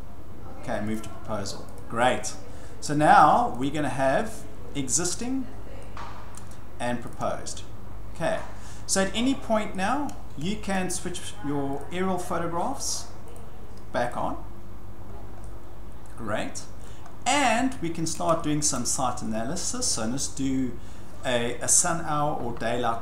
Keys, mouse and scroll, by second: 0.9 click, 1.8 click, 3.6 click, 5.5 scroll, 6.3 shift+scroll, 7.1 click, 8.5-8.8 scroll, 9.7-10.2 shift+scroll, 10.7 shift+middle click, 11.0 shift+scroll, 11.8 click, 13.3 click, 14.1 click, 15.1-15.4 scroll, 16.8-17.4 shift+scroll, 18.1 scroll, 18.8-19.2 scroll, 19.8 scroll, 21.9 scroll.